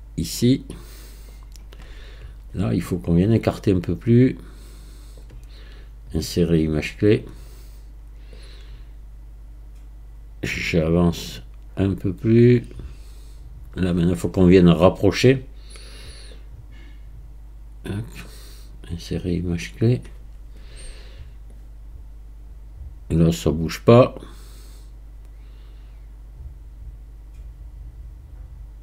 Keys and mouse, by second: 3.6-5.2 drag, 6.2-7.2 drag, 8.3 click, 16.3-18.3 drag, 19.0-19.9 right drag, 21.5 click, 21.9 click.